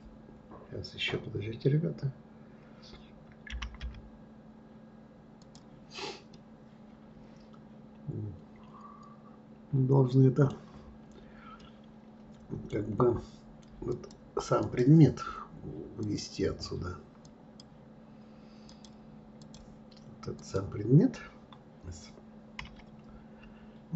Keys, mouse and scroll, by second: 6.3-9.3 middle drag, 11.6-13.9 middle drag, 13.9 click, 14.6 click, 16.0-20.5 drag, 22.6 KP_1.